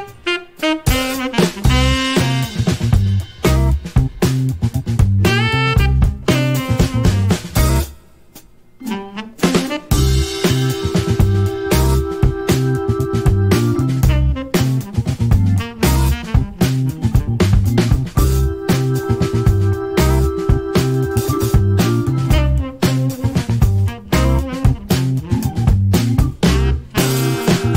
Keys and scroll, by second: 1.4 shift+a, 5.8 h, 9.6-12.4 typing.